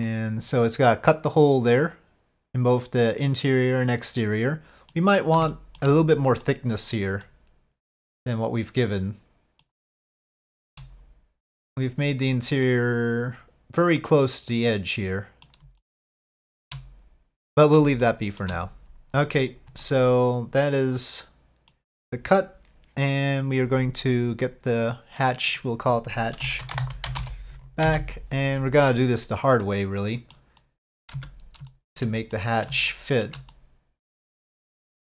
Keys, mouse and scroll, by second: 0.0-4.9 middle drag, 5.5-5.8 shift+middle drag, 6.4-6.9 middle drag, 7.2-9.6 middle drag, 10.3-10.7 shift+middle drag, 12.7-15.4 middle drag, 15.8-16.6 shift+middle drag, 17.5 middle drag, 18.0-18.4 shift+middle drag, 19.8-21.7 middle drag, 24.7 click, 26.4-28.5 shift+drag, 29.6-30.3 middle drag, 30.6 middle click, 31.2 Tab, 31.7 shift+middle click, 32.3 middle click, 32.9 shift+middle click, 33.5-34.6 middle drag, 34.8-35.0 middle drag.